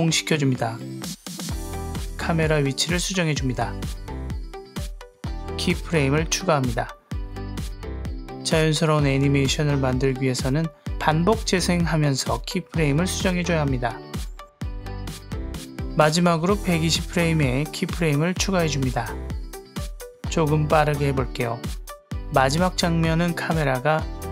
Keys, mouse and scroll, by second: 1.3 click, 2.2 shift+drag, 2.4 click, 3.3 click, 4.1 click, 6.7 click, 7.2 i, 7.8-11.6 drag, 11.7 space, 12.5 click, 14.6 space, 15.7 click, 17.1 click, 18.2 shift+middle click, 19.5 g, 19.9 click, 20.8 click, 20.9 g, 21.8 click, 22.2 click, 22.5 click, 23.4 click, 24.1 click.